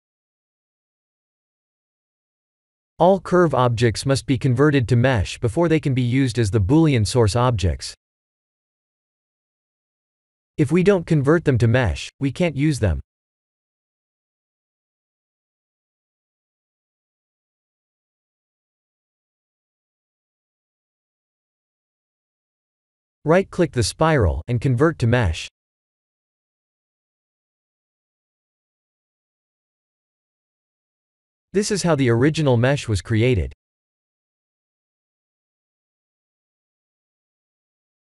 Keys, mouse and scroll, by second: 1.9 click, 3.9 click, 4.7 click, 5.1 click, 9.5 click, 12.7 click, 18.2 click, 19.3 click, 20.9 click, 23.5 click, 24.0 right click, 26.0 click, 27.8 click, 30.4-31.0 scroll up 7, 31.3 middle click, 34.0 scroll up 1, 36.6 ctrl+i, 37.6 x.